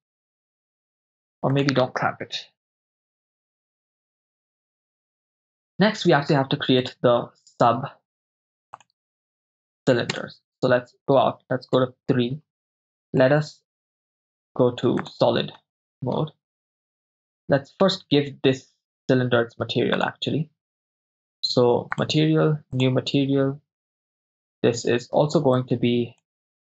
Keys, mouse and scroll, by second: 1.6-3.0 drag, 7.1 click, 7.1 right click, 8.9 drag, 10.1 KP_0, 11.8 KP_3, 13.2-13.8 shift+middle drag, 15.0 click, 15.6-16.1 shift+middle drag, 18.2-19.0 middle drag, 20.1 drag, 22.0-23.3 drag, 25.6 click.